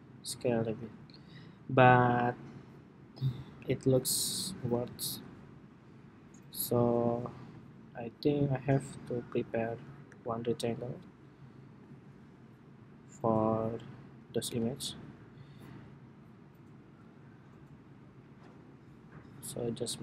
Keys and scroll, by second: 4.1 super+z, 5.3 super+z.